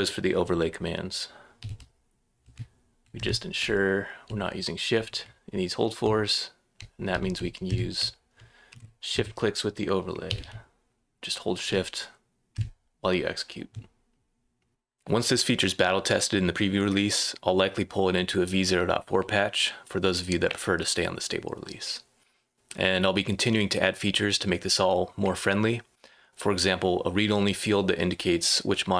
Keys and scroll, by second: 1.5-3.9 typing, 5.2-10.9 typing, 12.5 space, 14.4-15.2 typing.